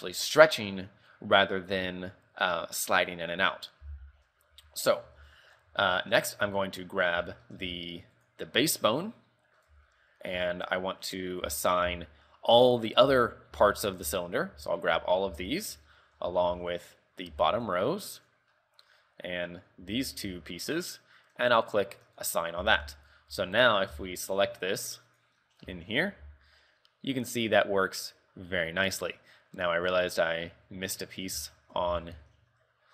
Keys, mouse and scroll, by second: 4.6 z, 4.9 scroll up 4, 5.3 Tab, 5.6 scroll down 4, 6.0 shift+middle click, 6.4 scroll up 1, 6.8 middle click, 7.4 shift+middle click, 7.9 Tab, 8.6 right click, 9.0 middle click, 10.0 Tab, 10.5 a, 10.8 middle click, 11.6 z, 12.0 z, 12.8 middle click, 13.2 l, 13.7 l, 14.7 l, 15.1 l, 15.4 l, 16.1 shift+middle click, 16.4 scroll up 2, 16.6 b, 17.5 b, 18.7 middle click, 20.0 l, 20.4 l, 20.9 scroll down 5, 21.1 middle click, 22.3 click, 22.7 z, 23.1 Tab, 23.4 KP_3, 23.6 scroll down 4, 24.1 z, 24.5 right click, 25.2 right click, 25.5 scroll up 5, 25.9 shift+middle click, 26.3 r, 29.7 middle click, 30.5 middle click, 31.2 middle click, 31.7 shift+middle click, 31.8 shift+middle click, 32.1 z.